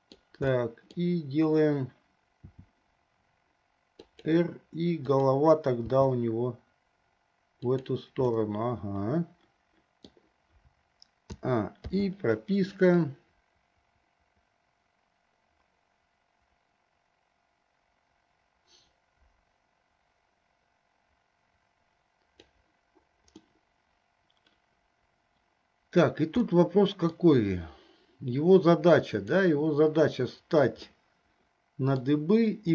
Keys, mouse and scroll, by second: 0.8 middle click, 2.5 r, 5.3 click, 6.0 g, 8.5-10.5 middle drag, 11.6 a, 12.2 i, 13.3-22.7 drag, 23.7-26.4 middle drag, 26.6-27.4 middle drag, 31.0-32.5 middle drag.